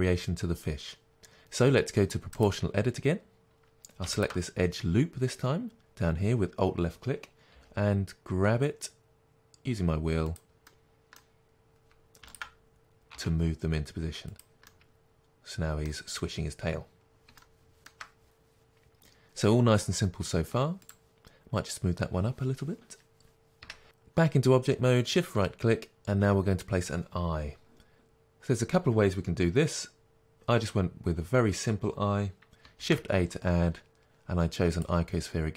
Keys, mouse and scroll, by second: 2.4-4.2 drag, 7.6 g, 10.5 click, 10.8-12.4 middle drag, 12.4 alt+click, 13.2 g, 14.4 click, 14.7-20.9 middle drag, 20.9 click, 21.8 g, 23.8 shift+right click, 34.8 shift+a.